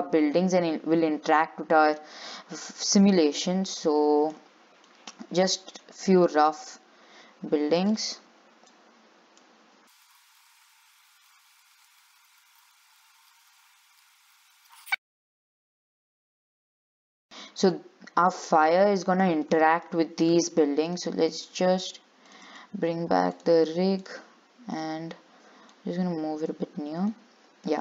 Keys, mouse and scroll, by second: 0.2 s, 3.0 click, 5.1 click, 6.8 click, 9.0 click, 10.0 click, 10.2 middle click, 10.4 click, 10.6 shift+d, 11.5 click, 11.8 shift+d, 12.2 click, 12.4 click, 12.8 click, 13.1 shift+d, 13.5 click, 14.1 shift+d, 14.5 click, 14.8 middle click, 15.5 click, 16.2 middle click, 16.4 click, 16.8 click, 17.0 click, 17.3 shift+middle click, 17.6 scroll up 3, 18.0-20.2 middle drag, 20.2 scroll up 1, 21.1 click, 22.5 click, 22.7 right click, 24.2 click, 24.9 click, 25.9 click, 27.3 click.